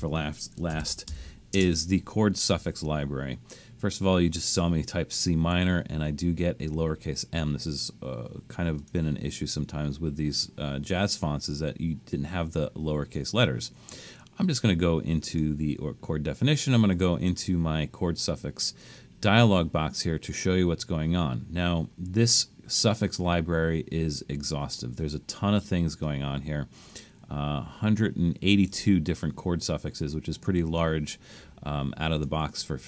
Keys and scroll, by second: 0.7-1.6 typing.